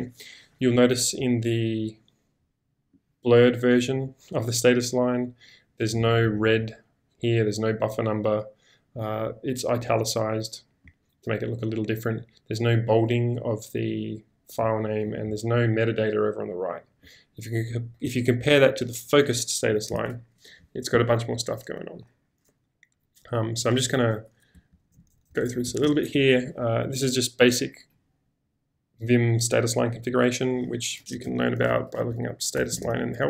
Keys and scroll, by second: 24.7 ctrl+e, 31.0-33.2 typing.